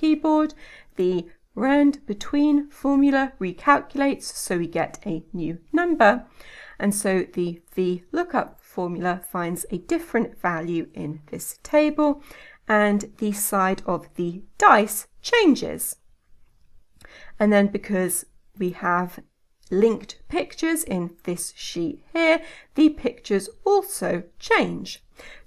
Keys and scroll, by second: 6.2 F9, 10.9 Escape, 14.6 F9, 22.7 F9.